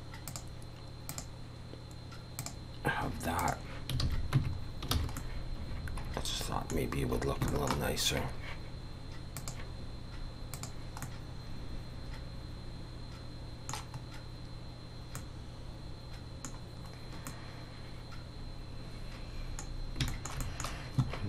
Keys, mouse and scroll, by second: 0.3 click, 1.1 click, 3.4 click, 4.0 alt+a, 4.4 Tab, 4.6 scroll down 3, 4.9 alt+a, 5.2 middle click, 6.9 scroll down 2, 7.5 shift+middle click, 9.4 click, 10.5 click, 11.0 middle click, 14.0 scroll up 3, 15.2 middle click, 17.3 middle click, 19.7 scroll down 3, 20.1 shift+middle click, 20.4 middle click.